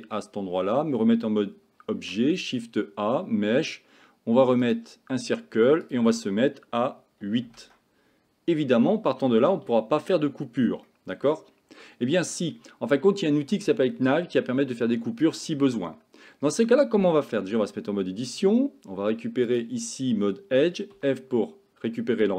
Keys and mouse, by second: 0.8 Tab, 2.0 shift+a, 5.9-7.6 drag, 9.7-10.2 shift+middle drag, 10.9-11.3 shift+middle drag, 17.5 Tab, 19.5 click, 21.0 f, 21.4 middle click.